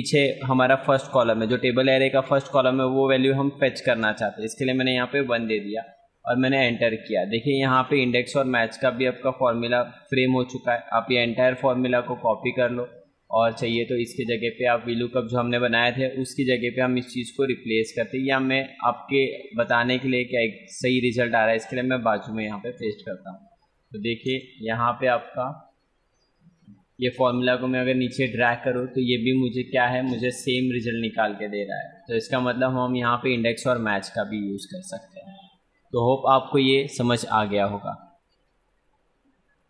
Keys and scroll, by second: 7.4 F2, 11.0 ctrl+c, 13.4 F2, 14.6 shift+super+Left, 18.8 F2, 22.0 ctrl+v, 24.3 ctrl+space, 27.2 ctrl+d.